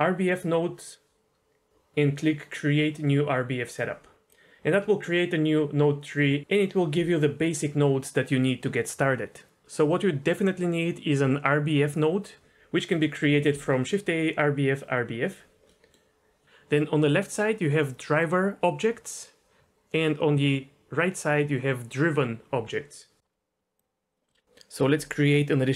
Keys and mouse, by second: 0.3 click, 3.7 click, 4.3 drag, 13.5 shift+a, 15.8 middle click, 23.7 click, 23.9 click, 24.1 click, 24.2 middle click.